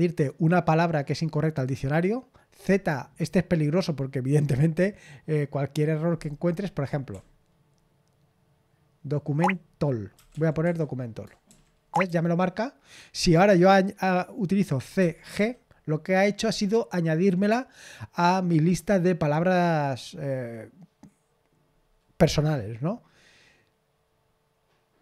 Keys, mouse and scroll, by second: 7.1-12.5 typing, 14.9-15.3 typing.